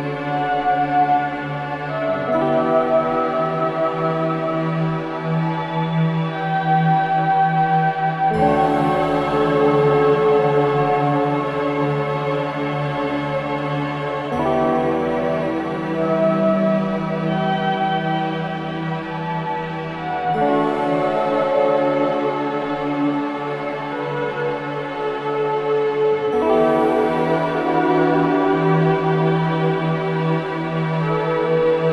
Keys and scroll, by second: 6.2 space, 10.5 space, 12.0 shift+a.